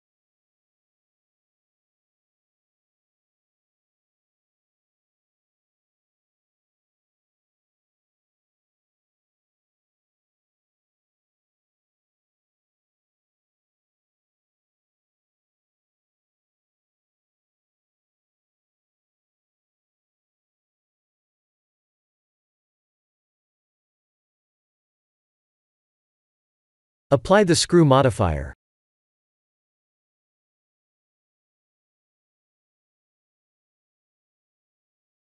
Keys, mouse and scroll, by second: 0.3 e, 4.4 n, 6.1 click, 7.2 click, 10.2 click, 11.5 click, 17.7 Tab, 18.5 shift+middle click, 20.1 Tab, 21.0 click, 23.5 click, 24.4 Tab, 24.8 shift+middle click, 26.5 click, 27.2 click, 34.0 middle click.